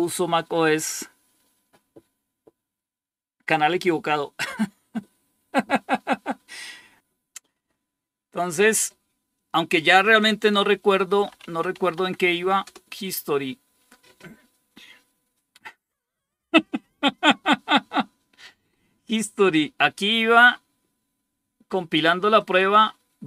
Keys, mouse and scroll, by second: 9.2 click, 10.8-12.1 typing, 12.5 Return, 22.3-23.2 drag.